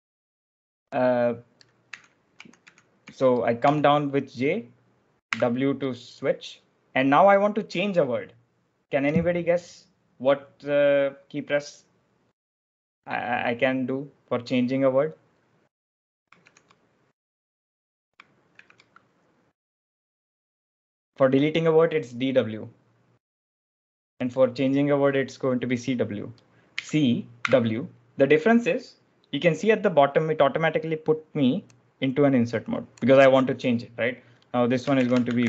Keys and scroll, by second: 1.5-3.5 typing, 5.1 w, 16.6 ctrl+alt+shift+super+j, 19.3 ctrl+alt+shift+super+j, 19.3 ctrl+alt+shift+super+l, 26.6-27.8 typing, 34.6-35.4 typing.